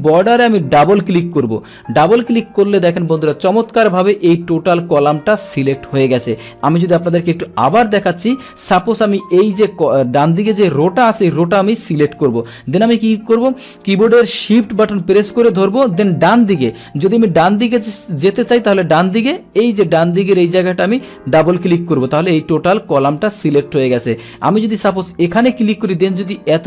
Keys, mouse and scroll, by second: 0.7 shift+click, 0.9 shift+click, 7.3 ctrl+Home, 9.2 click, 21.4 shift+click, 24.3 click.